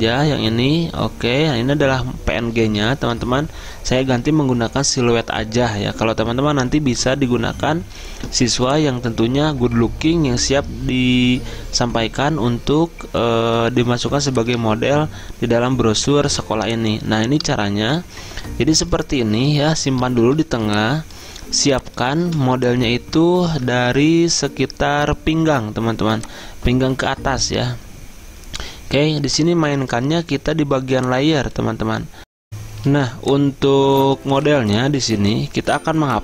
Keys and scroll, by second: 3.0 Return, 19.6 Return, 20.2 z, 22.3 v, 23.8 ctrl+z.